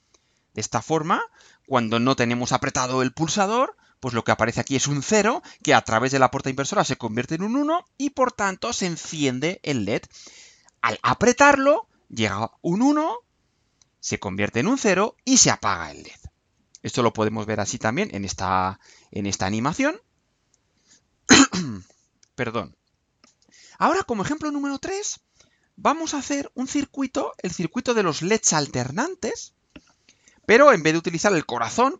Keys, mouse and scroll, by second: 15.6-16.0 scroll down 2, 16.2-16.6 scroll down 2, 27.2 click.